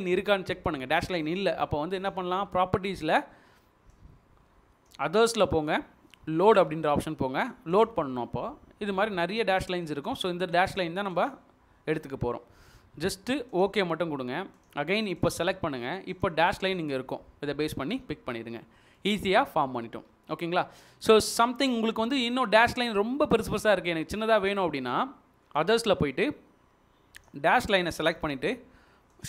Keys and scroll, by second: 18.1 Escape.